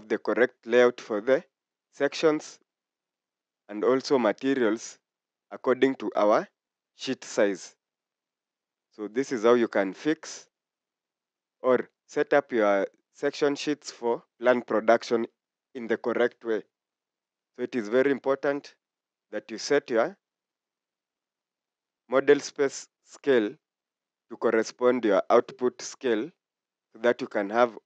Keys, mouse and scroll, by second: 1.5 scroll up 1, 2.6 scroll down 1, 13.8 scroll down 1, 15.1 scroll up 1, 18.5 scroll down 1.